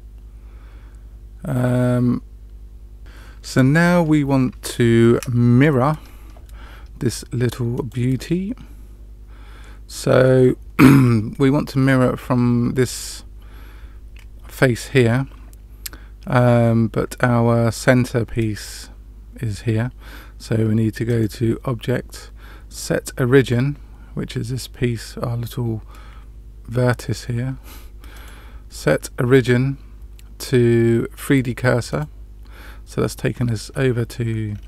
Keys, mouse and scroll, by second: 7.7 click, 21.0-23.8 drag, 28.1-31.9 drag, 33.3-33.7 scroll up 1, 33.7-34.4 scroll down 1, 34.4-34.6 scroll up 2.